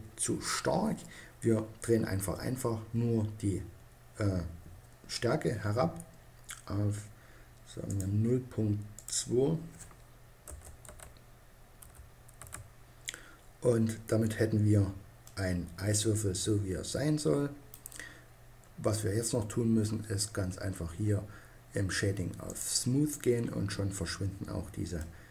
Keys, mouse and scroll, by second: 7.5-10.3 drag, 14.1-16.7 drag, 22.0-25.3 drag.